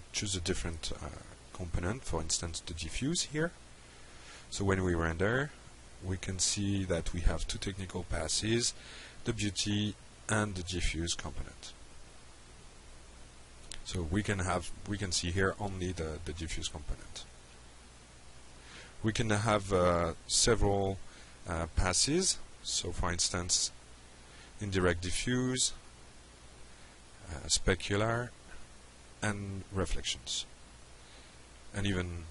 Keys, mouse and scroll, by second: 1.9 click, 2.8 click, 3.9 F5, 9.3 click, 10.7 click, 17.4 click, 19.6 click, 20.4 click, 21.0 click, 22.5 click, 24.1 click, 25.2 drag, 27.0 click, 28.3 click, 30.7 click, 32.0 click.